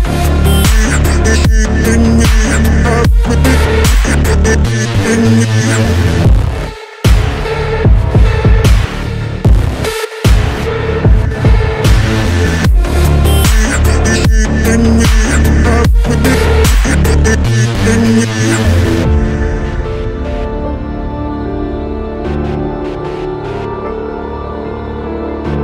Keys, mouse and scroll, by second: 0.2-0.5 alt+scroll up 1, 1.4 alt+scroll up 1, 1.6 ctrl+t, 4.1 double click, 8.6 right click, 9.4 right click, 9.6 ctrl+t, 13.0 ctrl+z, 13.6-14.1 alt+scroll down 2.